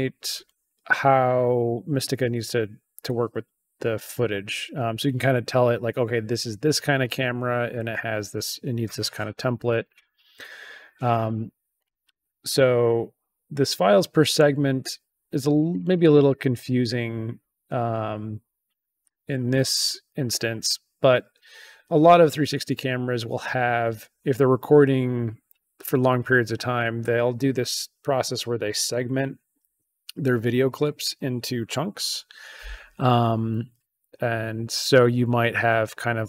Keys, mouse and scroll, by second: 11.7 click, 15.4 click, 15.6 click, 15.8 click.